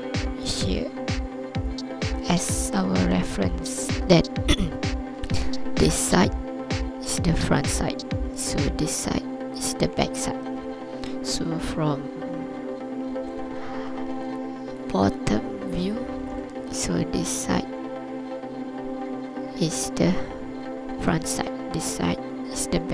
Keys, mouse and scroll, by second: 2.1 click, 2.5 scroll up 3, 3.1 alt+a, 3.4 scroll down 2, 10.7 scroll down 2, 13.2 ctrl+KP_7, 14.3 ctrl+click, 15.1-15.5 scroll up 3, 15.9 ctrl+click.